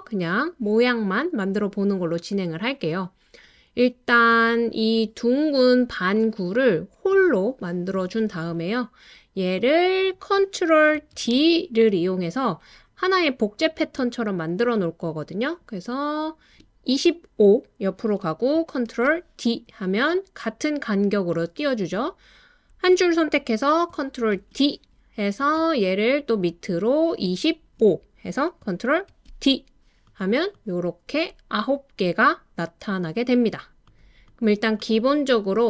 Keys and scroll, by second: 11.1 super+d, 18.9 super+d, 24.3 super+d, 29.1 super+d.